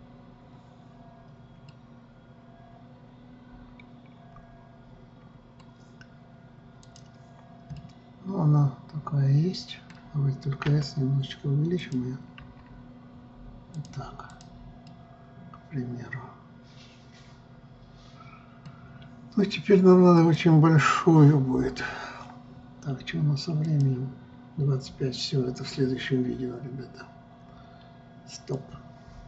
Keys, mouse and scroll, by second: 2.3-5.3 middle drag, 7.4 click, 8.4-11.3 middle drag, 11.3 s, 12.4 click, 13.0 s, 14.9 click, 15.5-18.5 middle drag, 20.7 click.